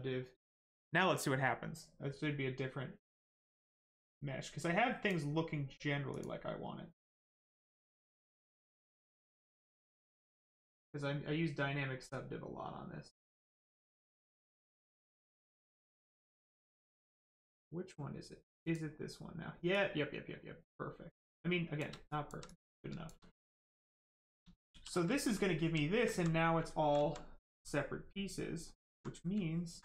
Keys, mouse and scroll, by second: 4.0 click, 10.0 click, 18.5 click, 22.0 alt+click, 22.4 click, 22.5 click, 22.9 shift+click, 24.7 shift+f, 25.2 alt+right click, 25.7 alt+right click, 25.8 alt+right click, 28.8 alt+right click.